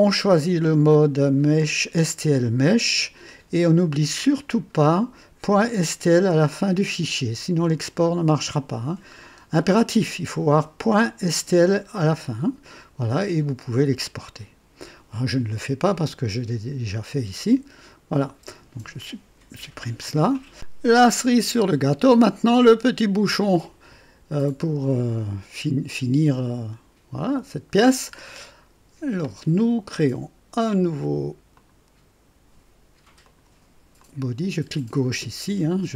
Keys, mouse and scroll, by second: 4.8 click, 9.0-9.5 scroll up 2, 17.4 Escape, 19.5 Delete, 23.8 scroll up 2, 24.4 right click, 28.1 scroll down 2, 31.5 click, 33.2 click, 33.9 click.